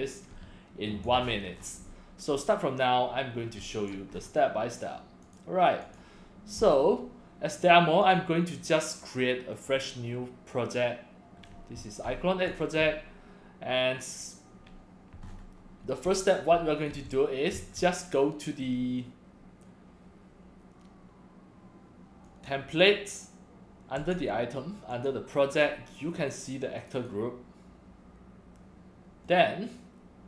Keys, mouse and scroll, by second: 0.4 c, 1.3-1.6 scroll down 2, 3.4 scroll down 1, 3.6 c, 3.7 drag, 4.1 scroll up 1, 5.2 click, 5.8 click, 8.0 click, 9.5 click, 11.4 scroll down 2, 11.8 x, 11.9-12.5 drag, 12.0 x, 14.2 click, 15.2-15.7 scroll up 2, 16.0 x, 16.1-16.9 drag, 16.5 c, 17.1 x, 17.1 click, 17.5 c, 22.3 click, 24.0 click, 24.9 click, 25.5 click, 26.8 click, 27.0 click, 29.2 click.